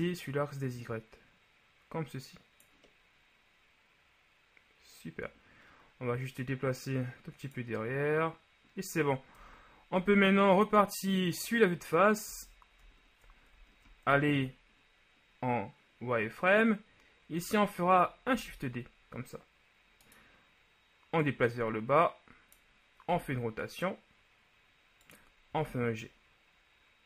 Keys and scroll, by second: 9.5 KP_1, 12.5 z, 13.6 ctrl+z, 18.3 shift+d, 23.2 r, 25.7 g.